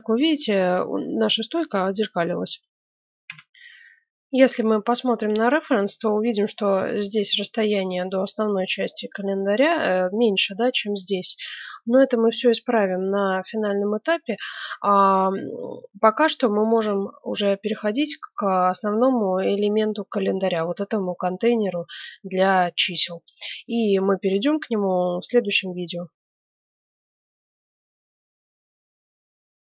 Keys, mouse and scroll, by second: 3.2 F9, 16.9-17.9 scroll down 1, 17.9-18.6 scroll down 1, 18.6 scroll down 1, 19.0-20.6 middle drag, 23.6-25.5 middle drag.